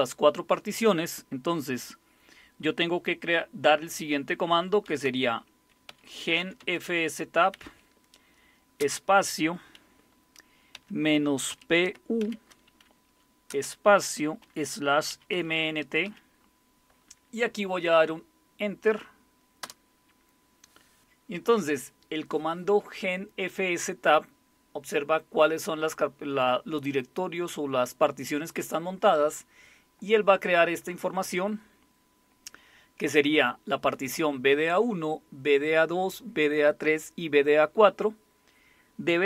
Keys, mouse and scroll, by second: 4.6-8.8 typing, 10.7-12.2 typing, 13.5-16.0 typing, 19.6 Return.